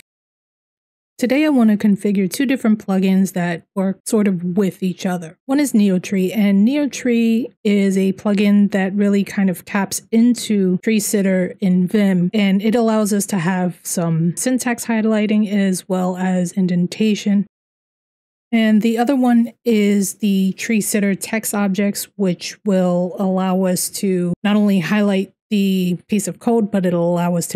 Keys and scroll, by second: 0.3 j.